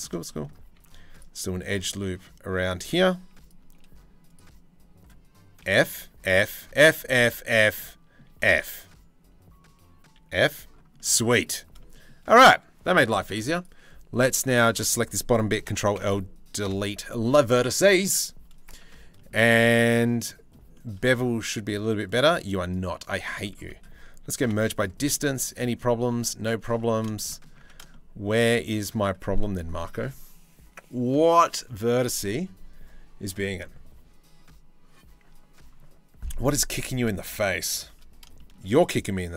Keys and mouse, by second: 0.4 ctrl+r, 2.5 2, 5.3-7.9 typing, 9.8 f, 15.3 ctrl+l, 16.3 Delete, 18.5 Tab, 21.7 click, 22.2 click, 22.6 click, 22.9 Tab, 23.2 a, 24.0 m, 26.5 Tab, 27.2 Tab, 27.5 shift+click, 36.3 click, 37.2 shift+middle click, 37.9 shift+middle click, 39.1 Tab.